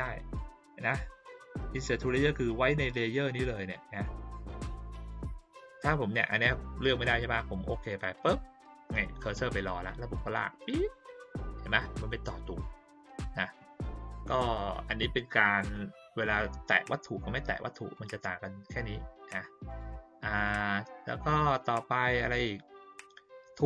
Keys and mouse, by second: 6.5 click, 6.8 click, 7.1 click, 8.0 click, 10.4 click, 17.9 click, 19.6 click, 21.2 click.